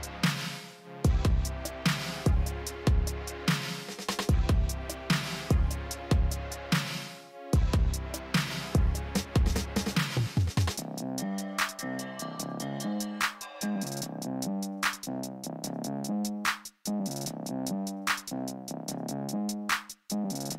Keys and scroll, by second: 8.8 l, 11.6 b.